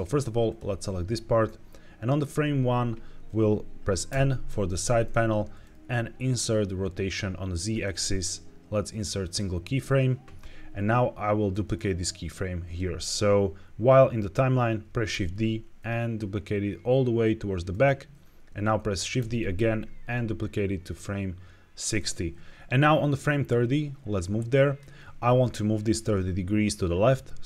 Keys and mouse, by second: 4.0 n, 7.6-9.2 right drag, 11.4 click, 15.0 shift+d, 17.6-18.0 drag, 19.1 shift+d, 21.7 click, 23.2-24.7 drag.